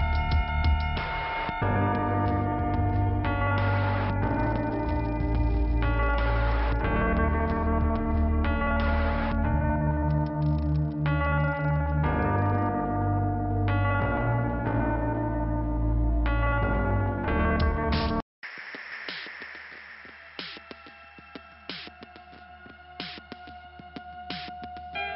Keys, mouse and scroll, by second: 0.1 click, 0.8 click, 1.6 click, 2.9 click, 6.8 click, 10.1 click, 13.2 right click, 13.8 click, 15.8 click, 16.2 click, 16.3 double click, 17.4 double click, 17.8 scroll up 2, 19.6 click, 20.6 scroll up 1, 21.8 click.